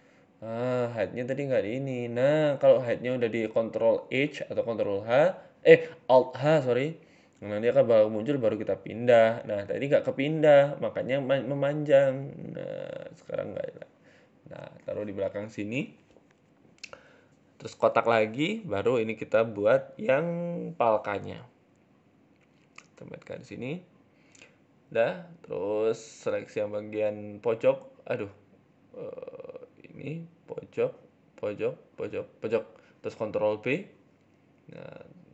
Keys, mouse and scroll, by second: 1.0 alt+h, 1.9-2.6 scroll down 2, 1.9 KP_7, 2.6-3.0 scroll down 2, 3.0 z, 3.9 g, 5.5 s, 7.3 g, 8.7 click, 8.9 click, 9.2 middle click, 9.5 Tab, 9.6 middle click, 10.1 g, 11.1 z, 11.5 middle click, 11.8 scroll up 2, 11.9 middle click, 12.4 g, 13.5 middle click, 14.3-15.1 scroll down 4, 14.5 middle click, 15.9 shift+a, 17.2 scroll down 4, 17.8 KP_7, 18.4 g, 19.5 shift+middle click, 19.7-20.1 scroll up 4, 19.9 shift+middle click, 20.1 s, 22.1 middle click, 22.1 s, 23.7 shift+middle click, 24.0 middle click, 24.8 middle click, 25.1 Tab, 25.5 KP_7, 26.4 click, 26.8 a, 26.9 a, 27.1 c, 29.0 a, 29.1 a, 29.5 c, 30.9 click, 31.6 shift+click, 33.0 ctrl+b.